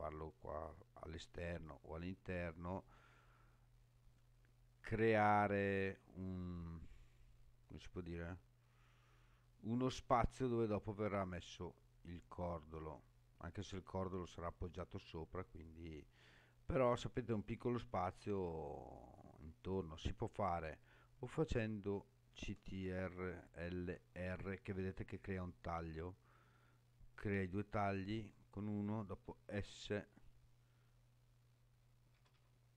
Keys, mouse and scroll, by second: 16.2-16.7 scroll up 3, 16.7 scroll down 3, 17.9 shift+middle click, 18.7 scroll up 2, 20.4 click, 23.7 ctrl+r, 29.1 s, 32.1 s, 32.3 s.